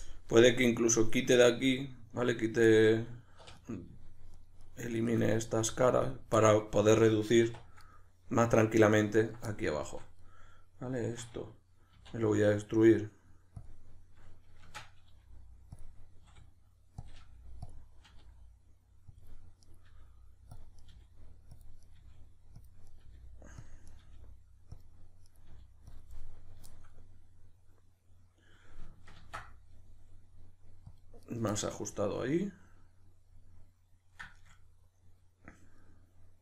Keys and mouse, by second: 3.4 3, 3.5 right click, 4.3 shift+right drag, 4.6 shift+right click, 4.9 shift+right click, 5.2-7.8 middle drag, 5.5 x, 7.4 1, 7.8 right click, 9.2 ctrl+right click, 9.5-12.0 middle drag, 12.0 e, 13.7 click, 14.6 shift+Tab, 15.8 click, 16.2 s, 17.1 click, 17.2 g, 17.7 click, 18.0 r, 19.2 click, 19.6 right click, 19.9 g, 20.6 click, 20.8 right click, 20.9 g, 21.6 click, 21.8 right click, 22.0 g, 22.7 click, 22.9 right click, 23.0 g, 23.7 click, 23.9 right click, 24.0 g, 24.8 click, 25.3 right click, 25.5 g, 26.0 click, 26.2-36.4 middle drag, 29.1 ctrl+r, 31.3 right click.